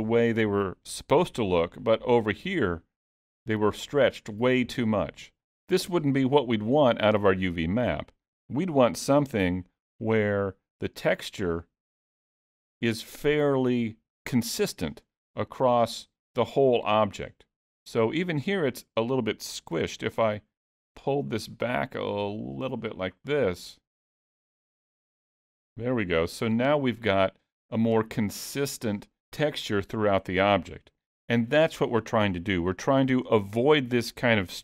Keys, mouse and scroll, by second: 1.9 middle click, 4.9 middle click, 7.8-9.1 scroll down 2, 9.1 g, 15.3 middle click, 16.4 middle click, 19.8 g, 26.2 middle click, 27.8-28.4 scroll down 3, 28.4 middle click, 31.0-32.3 scroll up 2, 32.6-33.2 scroll down 3, 33.3 shift+middle click.